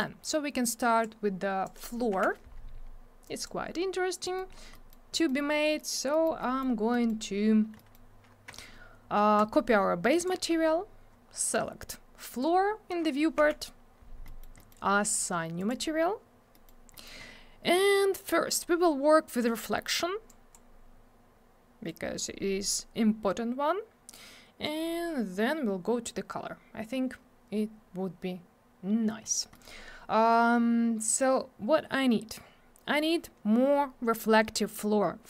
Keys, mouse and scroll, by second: 0.0 click, 1.6 click, 1.7 click, 2.1 m, 3.2 click, 4.2 middle click, 4.3 middle click, 4.5 scroll down 1, 4.7 middle click, 4.9 middle click, 5.1 middle click, 5.2 middle click, 5.4 scroll up 1, 5.8 middle click, 5.9 middle click, 6.1 middle click, 6.2 middle click, 6.4 middle click, 6.9 middle click, 7.0 middle click, 7.8 middle click, 7.9 middle click, 9.3 shift+click, 11.4 click, 11.5 click, 12.3 click, 12.4 click, 13.4 m, 14.2 middle click, 14.4 middle click, 14.6 middle click, 14.7 double middle click, 15.6 click, 15.7 click, 16.5 middle click, 16.6 middle click, 16.9 middle click, 17.1 middle click, 17.2-17.5 scroll up 1, 19.4 click, 20.3 click, 21.8 click, 24.1 click, 29.2 middle click, 29.4 middle click, 29.5 middle click, 29.6 double middle click.